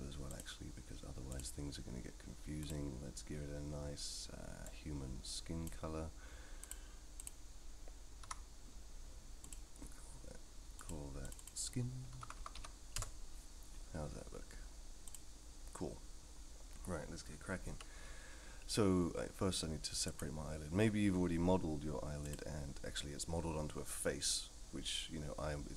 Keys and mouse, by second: 0.3 click, 1.3 click, 2.6 click, 6.7 click, 8.2 a, 9.4 click, 10.8 click, 11.2 click, 11.5-13.6 drag, 15.1 click, 17.7 KP_3, 20.1 click.